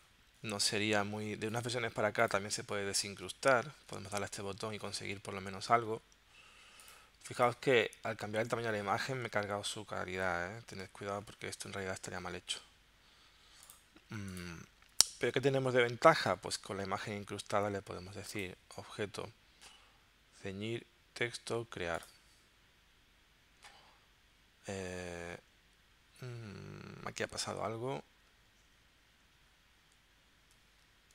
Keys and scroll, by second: 29.8 super+z.